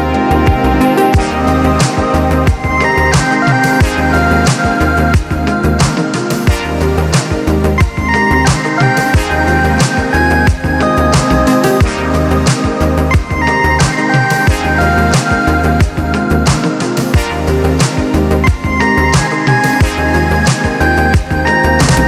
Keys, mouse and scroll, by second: 1.0 click, 2.1-4.4 drag, 5.4-7.3 drag, 8.6-10.6 drag, 10.6-11.4 scroll down 4, 11.4 click, 11.8-14.6 middle drag, 14.6-15.4 scroll up 1, 15.4-15.9 shift+middle drag, 15.9-16.3 scroll up 1, 16.3 click, 17.5 click, 18.0-20.9 drag.